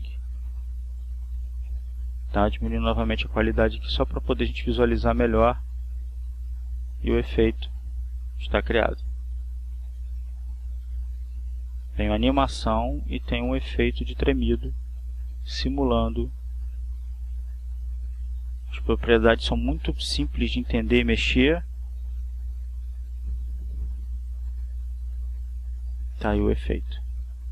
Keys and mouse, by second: 0.4 click, 1.5 click, 2.9 click, 4.3-5.4 drag, 13.4 click, 21.3 click, 22.1 click, 26.4 click.